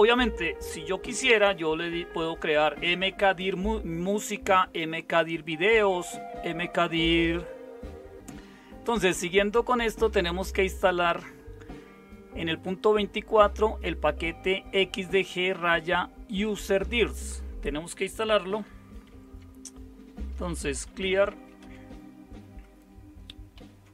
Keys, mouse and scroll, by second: 19.1 super+0, 20.5-21.8 typing, 23.3-23.9 typing.